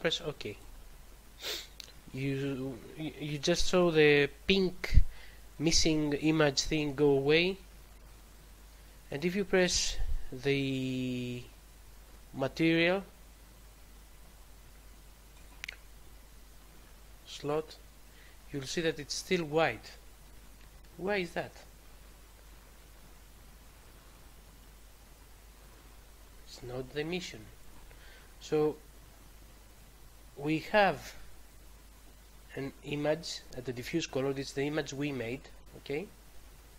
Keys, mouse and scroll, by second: 0.5 click, 9.0 click, 15.3 click, 23.7 click, 27.6 click, 27.8 click, 35.9-36.3 scroll down 2.